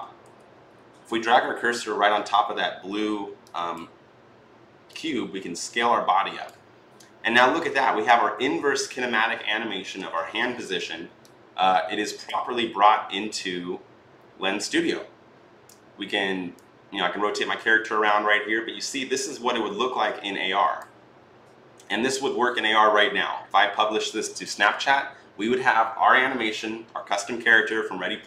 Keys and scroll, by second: 0.1 f.